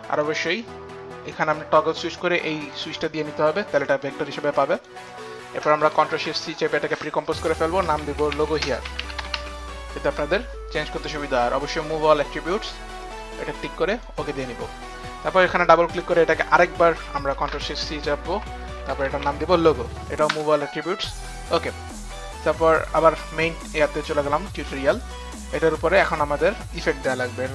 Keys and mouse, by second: 1.3 click, 2.6 click, 4.5 click, 4.8 click, 6.2 ctrl+shift+c, 6.2 click, 7.6-13.0 typing, 8.0 click, 8.3 click, 8.7 click, 8.9 click, 11.8 click, 12.5 click, 13.1 click, 13.9 click, 15.5 click, 15.9 click, 16.3 click, 16.4 click, 17.2 click, 17.4 ctrl+shift+c, 17.4 click, 18.2 ctrl+shift+c, 18.2 click, 18.8-19.7 typing, 19.0 click, 19.2 click, 20.3 Return, 22.8 click, 23.8 Return, 23.8 click, 25.0 click.